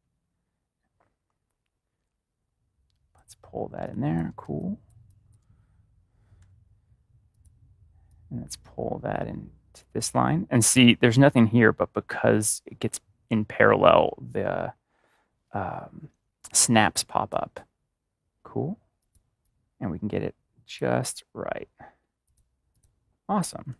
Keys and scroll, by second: 3.7-5.0 typing, 23.4 a, 23.6 ctrl+-.